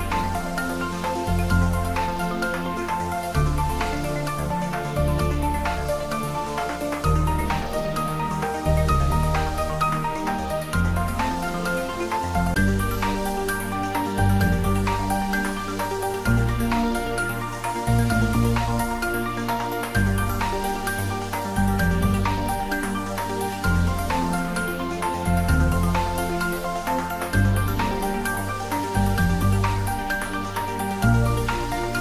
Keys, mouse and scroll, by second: 1.6 click, 4.0 3, 5.1-5.9 scroll down 1, 5.9-8.1 middle drag, 8.1 click, 9.1-9.5 scroll down 1, 9.6 middle click, 10.6 scroll up 1, 11.2 middle click, 11.6 scroll up 1, 12.2 middle click, 13.0 click, 30.8-32.0 middle drag.